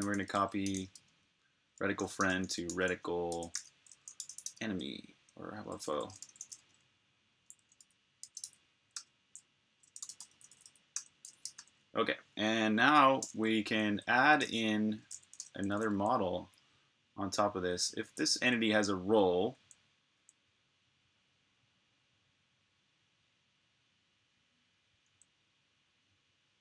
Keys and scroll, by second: 0.0-0.7 typing, 2.0-3.4 typing, 4.7-5.7 typing, 7.3-8.8 typing, 10.3-11.2 typing, 13.2-15.2 typing, 17.4 k, 19.4 j, 24.8 j.